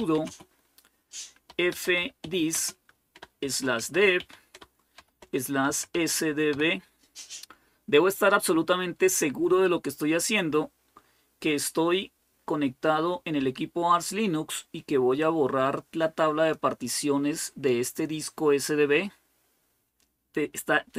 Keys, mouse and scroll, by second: 0.0-6.3 typing, 15.0-17.1 drag.